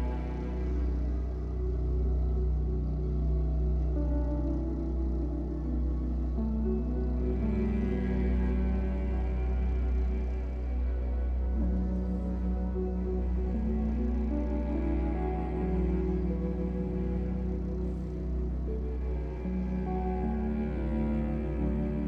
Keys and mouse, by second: 0.3 ctrl+alt+click, 1.3 typing, 2.2-3.1 alt+shift+drag, 3.1-3.6 drag, 4.9 click, 6.2-7.4 ctrl+alt+drag, 8.7-9.2 drag, 12.0 Tab, 13.5 s, 14.5 Escape, 16.3 a, 18.1 click, 19.6 click.